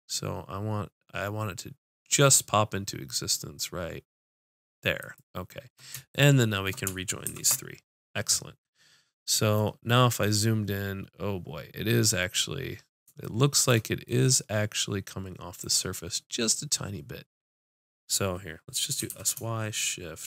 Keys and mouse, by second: 5.3-7.3 drag, 7.3 ctrl+j, 19.0 s.